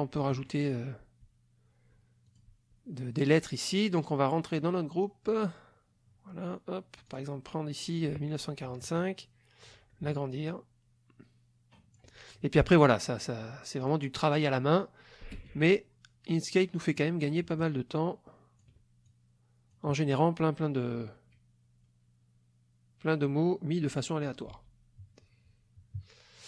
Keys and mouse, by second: 0.3 middle click, 2.3 click, 4.5 click, 5.3 click, 7.1 click, 8.7-9.9 ctrl+drag, 10.5-12.1 ctrl+drag, 13.8 click, 14.8-17.1 drag, 15.4 space, 17.6-18.8 ctrl+drag, 19.0 ctrl+click, 24.5 ctrl+z, 25.1 ctrl+-.